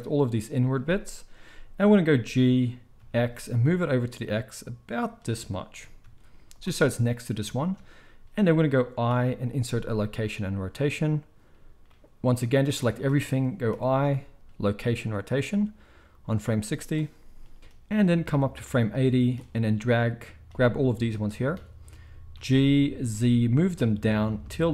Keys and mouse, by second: 2.1 g, 4.8-11.8 middle drag, 5.7 g, 9.1 i, 11.8-24.7 drag, 22.3 g.